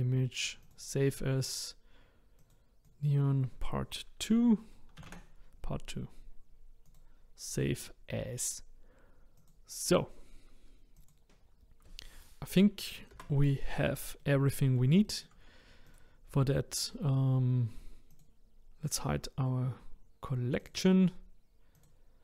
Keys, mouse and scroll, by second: 11.0 click, 13.1 KP_0, 13.8-14.2 scroll down 3, 14.2-15.9 middle drag, 15.9 click, 18.1 click, 20.6-21.8 drag.